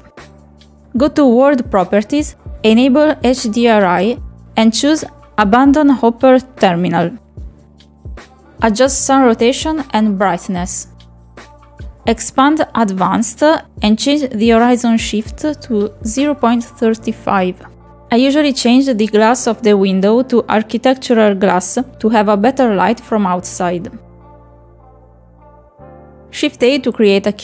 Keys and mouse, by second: 1.8 click, 3.7 click, 5.1 click, 6.1 click, 6.7 click, 7.0 click, 8.3-10.8 drag, 11.0 click, 12.2 click, 13.1 click, 13.9-16.8 drag, 17.0-18.0 drag, 18.4 middle click, 19.3 shift+middle click, 19.8 click, 20.5-21.8 drag, 21.7 s, 22.4 click, 24.7 click, 25.1 click, 25.6 click, 27.3 middle click.